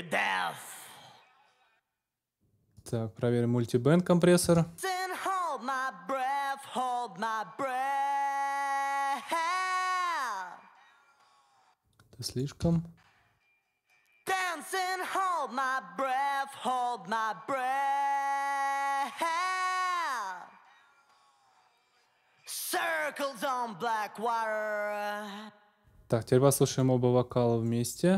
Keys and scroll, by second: 1.5 space, 4.4 space, 11.4 space, 25.1 space.